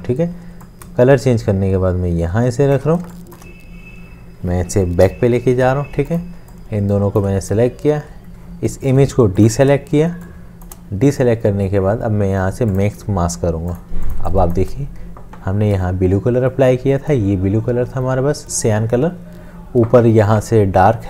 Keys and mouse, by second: 1.0 shift+click, 3.0 space, 5.0 ctrl+[, 9.4 shift+click, 10.3 space, 10.5 click, 10.9 space, 14.2 space.